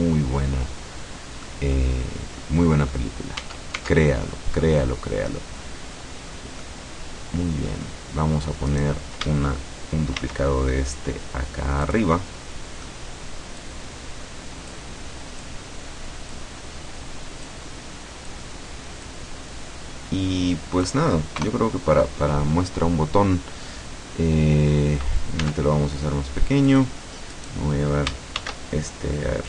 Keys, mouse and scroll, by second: 2.0-2.6 scroll down 1, 2.8 middle click, 3.4 Tab, 4.3-6.3 middle drag, 6.7-8.0 middle drag, 8.8 right click, 10.2 shift+d, 12.0 click, 12.2 middle click, 13.7-15.0 drag, 15.5-16.7 drag, 17.5-18.6 drag, 19.1-21.1 drag, 21.4 KP_0, 25.4 s, 26.7 click, 27.4 right click, 28.4 shift+d.